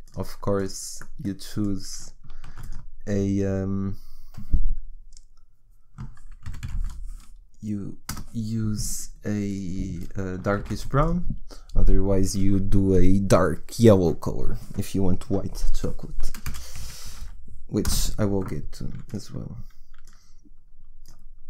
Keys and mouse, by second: 1.6 click, 2.4 shift+a, 10.6 shift+a, 20.0-21.4 drag.